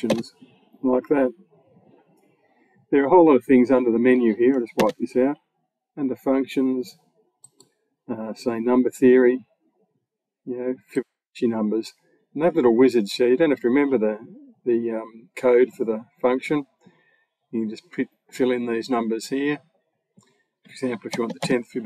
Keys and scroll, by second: 4.6 BackSpace, 21.0 1, 21.2 0.